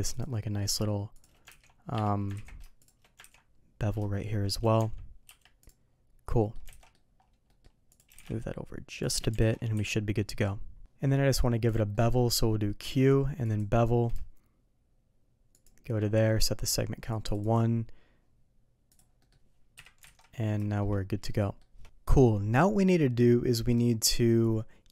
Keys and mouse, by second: 0.1 click, 0.4 middle drag, 1.5 ctrl+b, 3.3 ctrl+b, 4.8 Tab, 6.4 middle click, 6.7 alt+a, 6.8 middle drag, 7.5 middle click, 7.9 click, 8.1 g, 9.4 alt+a, 9.7 KP_3, 11.9 middle click, 12.8 q, 17.5 click, 18.9 click, 19.2 middle click, 19.7 KP_3, 20.0 alt+a, 20.7 shift+middle click, 21.3-21.6 shift+middle drag.